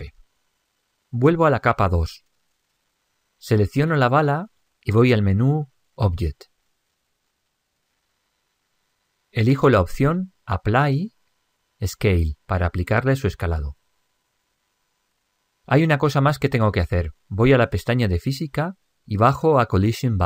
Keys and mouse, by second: 2.7 click, 5.3-8.0 middle drag, 8.0 click, 17.3-20.2 middle drag.